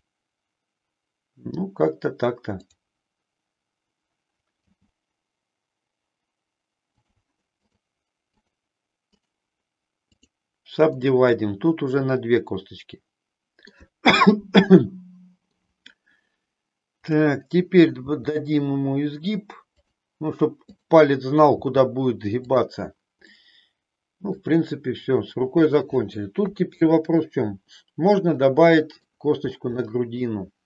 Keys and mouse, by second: 4.6 g, 7.0 click, 7.5 click, 10.9-13.8 middle drag, 14.6 middle click, 17.0 click, 17.9 g, 19.9 click, 21.6 g, 23.3-24.4 middle drag, 26.3 KP_3, 28.4 middle click, 29.8 middle click.